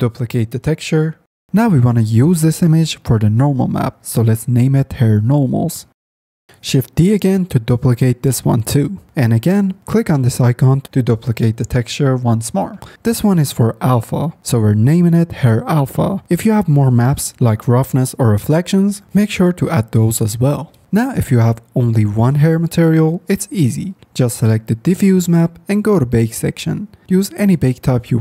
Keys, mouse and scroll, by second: 8.1 shift+d, 25.2 click, 25.9 middle click, 26.7-28.2 drag.